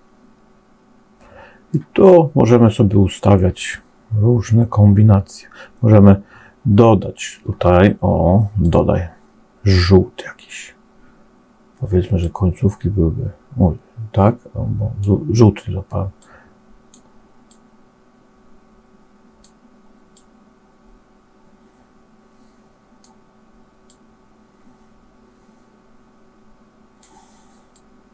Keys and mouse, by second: 8.5 click, 12.1-14.9 drag, 16.1 click, 17.4-19.4 drag, 20.1-22.9 drag, 23.9-26.9 drag, 27.6 click.